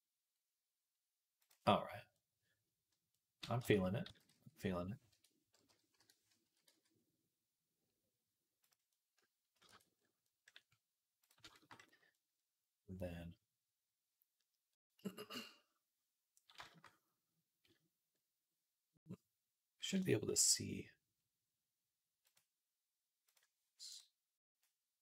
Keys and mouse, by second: 3.4 Tab, 3.9 s, 5.5-9.3 drag, 5.5 ., 6.3 s, 9.5 Tab, 11.1-22.2 shift+drag, 22.2 middle click, 23.1 click, 23.2 middle click, 23.7 click, 23.8 middle click, 24.4-25.0 drag.